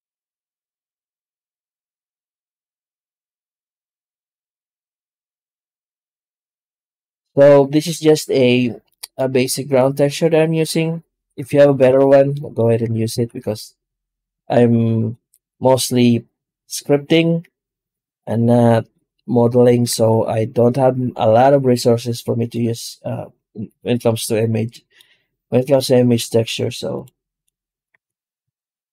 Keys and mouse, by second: 0.3-2.4 drag, 4.9 z, 8.7 middle drag, 11.3 Tab, 11.8 alt+shift+z, 12.2 middle click, 12.6 w, 13.0 w, 19.8 Tab, 22.4-24.8 middle drag, 26.8 click, 27.8 Tab, 28.3 Tab.